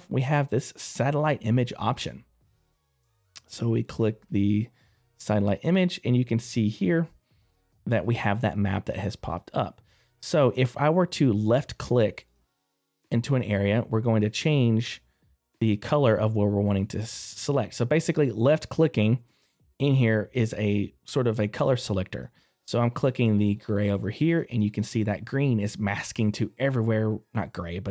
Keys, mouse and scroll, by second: 5.0 middle click, 6.5-7.9 scroll down 1.